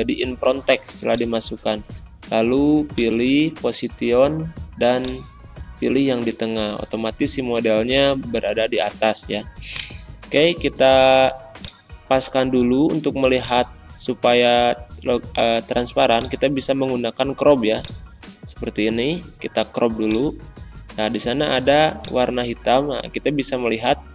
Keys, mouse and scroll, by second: 9.6 right click, 10.8 click, 20.6 click.